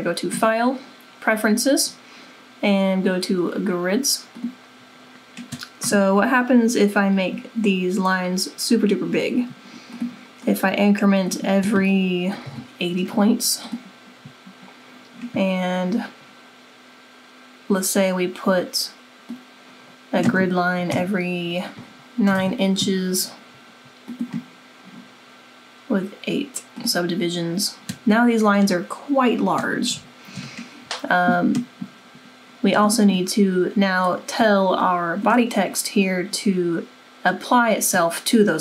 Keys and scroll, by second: 12.1-13.0 typing, 20.9 9, 22.0-22.8 typing.